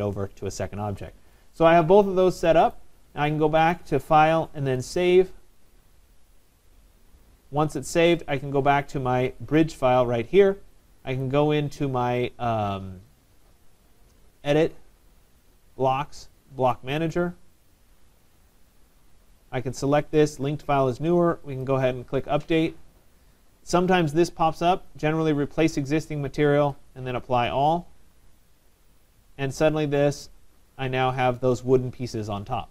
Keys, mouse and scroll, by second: 0.6 click, 1.0 middle click, 1.0 middle click, 1.1 middle click, 2.7 right click, 3.8 click, 4.9 click, 7.1 click, 9.6 click, 11.2 click, 17.2 click, 18.8 click, 21.7 click, 25.0 click, 26.9 click, 29.1 middle click, 29.1 middle click, 29.2 middle click, 30.5 click, 31.3 click, 31.7 middle click, 31.8 middle click, 31.8 middle click.